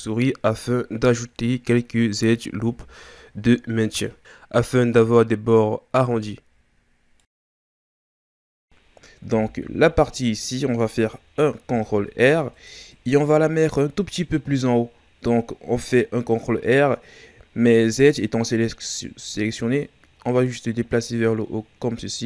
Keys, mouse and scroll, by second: 5.1 Tab, 7.0-8.5 scroll down 2, 8.5-9.2 scroll up 2, 9.2 Tab, 11.7 ctrl+r, 19.8-22.2 drag.